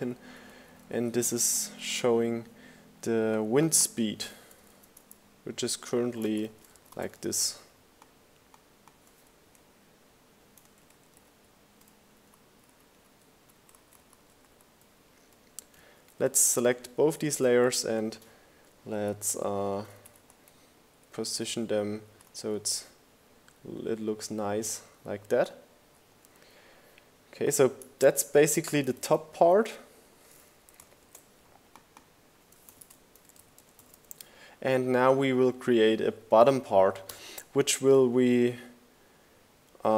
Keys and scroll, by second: 3.9 super+a, 4.2-5.8 typing, 10.4 shift+Right, 11.2 Up, 11.3 Left, 11.8 Right, 11.9 Up, 12.3 Left, 12.5 Up, 15.7 shift+Down, 17.6 shift+Up, 18.4 Up, 18.7 Down, 19.2 Right, 20.4 Left, 27.5 super+g, 28.6-29.7 typing, 31.3 shift+f, 31.9 shift+g, 32.1 shift+BackSpace, 32.3 shift+g, 32.5 Return, 35.7 r.